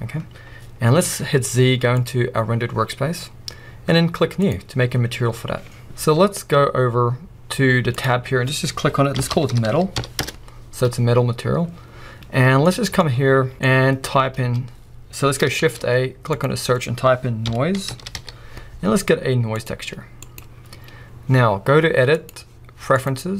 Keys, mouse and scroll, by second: 2.2 z, 4.6-19.7 drag, 10.3 Return, 19.7-20.7 middle drag, 20.7 click, 21.2 scroll down 1, 23.2 click.